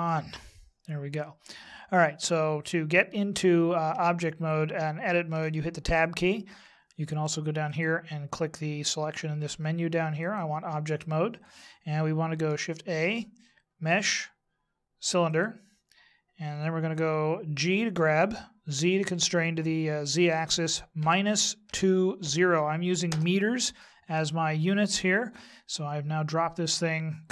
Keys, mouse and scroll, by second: 4.0 Tab, 5.3 Tab, 7.6 click, 10.3 click, 12.7 shift+a, 17.6 g.